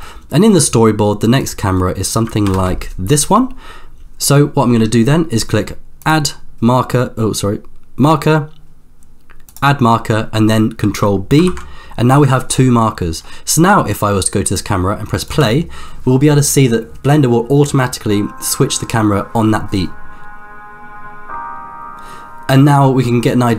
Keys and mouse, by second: 0.0 middle click, 2.7 ctrl+KP_0, 6.1-9.8 drag, 11.6 ctrl+b, 13.9-14.8 drag, 15.4 space.